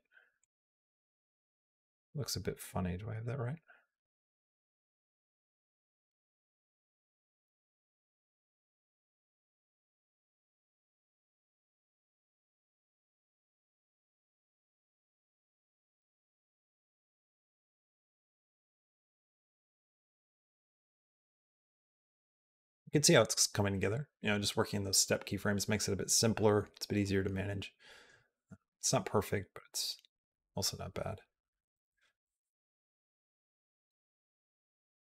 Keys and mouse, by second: 0.2-5.9 drag, 6.3 a, 6.3 g, 7.7 click, 8.0 g, 10.5-15.8 drag, 16.4 space.